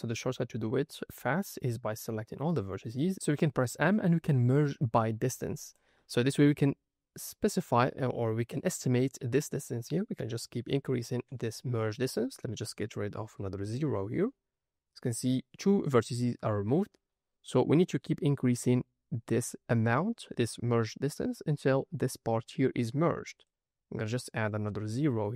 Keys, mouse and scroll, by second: 0.8 a, 1.3-3.0 scroll down 2, 3.7 m, 6.4 ctrl+middle click, 8.1 ctrl+middle click, 8.4 ctrl+middle click, 8.9 ctrl+click, 8.9 ctrl+middle click, 11.8-14.1 drag, 23.3-25.3 drag.